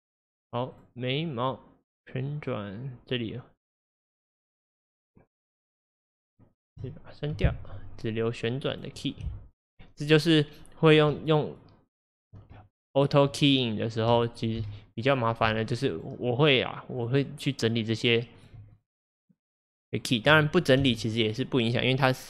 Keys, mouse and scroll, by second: 2.0 click, 4.6-7.4 drag, 7.4 Delete, 8.7 click, 9.7-11.3 drag, 11.5 shift+click, 12.0 shift+click, 13.6 shift+click, 14.6 Delete, 16.0 click, 17.0-20.9 drag, 20.9 Delete.